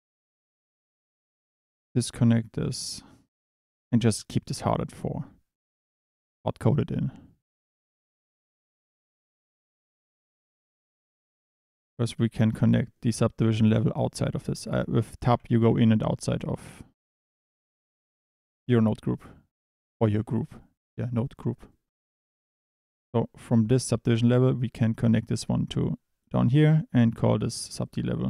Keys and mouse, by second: 1.5 click, 2.8 click, 7.5 click, 7.7 Tab, 8.7 click, 9.3 click, 14.6 click, 14.7 Tab, 15.2 Tab, 15.7 Tab, 16.4 Tab, 17.0 click, 17.2 Tab, 20.9 Tab, 21.1 click, 21.7 middle click, 22.2 drag, 22.5 click, 27.7 click, 27.9-28.2 drag.